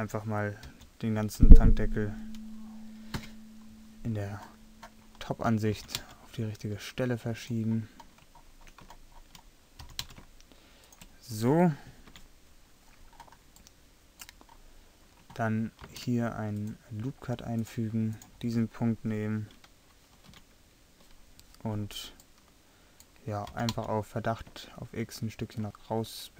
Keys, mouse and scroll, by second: 0.7 l, 3.2 KP_7, 4.9 scroll up 1, 5.8 g, 7.7 middle click, 10.0 g, 12.1 KP_3, 15.9 ctrl+r, 18.1-19.1 drag, 20.4 KP_3, 23.5 g.